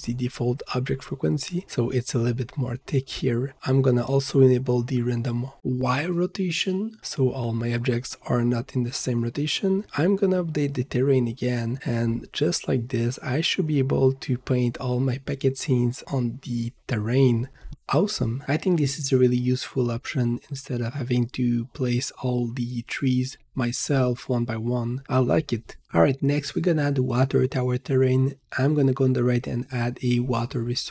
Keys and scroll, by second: 2.3 Return, 11.3 ctrl+s, 12.7 v, 26.4 ctrl+s.